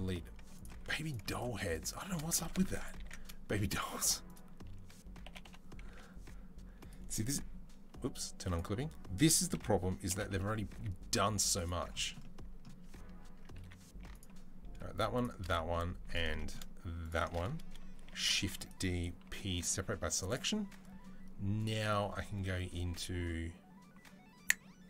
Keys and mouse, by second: 0.6 2, 0.8 click, 0.9 shift+middle click, 1.1 shift+click, 1.5-3.6 shift+middle drag, 2.4 ctrl+z, 2.8 ctrl+z, 3.7 click, 5.1 g, 8.3 click, 9.3 o, 9.9 g, 12.3-13.9 middle drag, 12.7 Tab, 13.0 Tab, 13.4 3, 13.9 alt+click, 15.2 middle click, 15.6 shift+click, 15.9 middle click, 16.4-18.0 alt+shift+drag, 17.9 shift+d, 18.0-20.0 middle drag, 19.0 p, 19.7 Tab, 20.0 click, 20.1-21.4 middle drag, 21.4-24.8 drag.